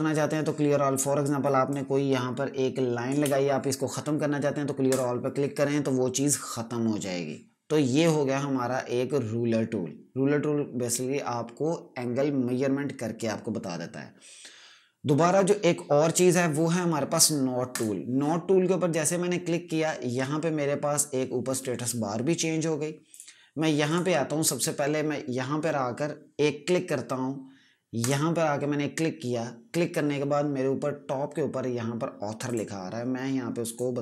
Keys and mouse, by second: 1.6 click, 4.8 click, 7.8 right click, 17.6 right click, 20.0 click, 23.0 click, 27.9 click, 32.3 click.